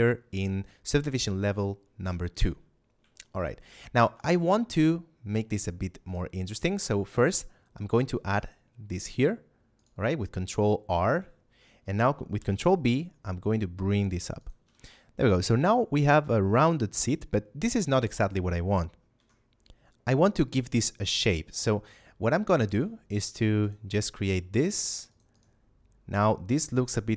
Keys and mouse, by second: 3.2 shift+middle click, 6.7 ctrl+r, 8.2 click, 9.7 right click, 12.3 ctrl+b, 14.2 click, 14.6 a, 14.9 shift+middle click, 19.0 F9, 22.5 ctrl+r, 23.5 click, 23.8 right click, 24.6 ctrl+r, 25.0 click, 25.2 right click.